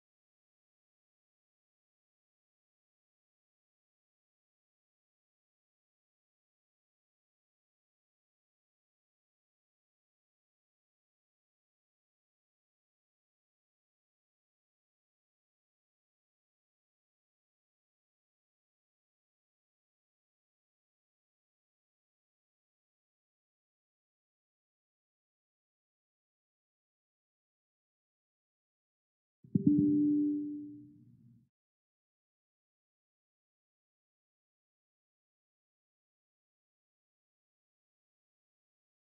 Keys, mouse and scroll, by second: 29.1 click, 32.2 click, 38.7 click.